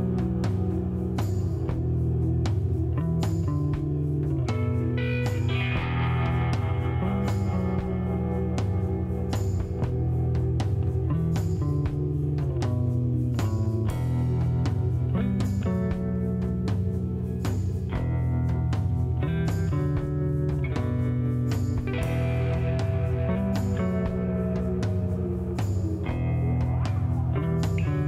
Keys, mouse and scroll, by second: 1.6 middle click, 2.2 click, 2.8-3.8 drag, 3.8 middle click, 5.1 a, 6.9-8.1 drag, 8.1 s, 12.2 click, 13.1 click, 14.0 middle click, 18.7 click, 20.0 click, 20.4 click, 21.1-23.1 drag, 23.1 a, 24.2 c, 24.7 c, 26.2 right click, 26.2 g, 27.8 a.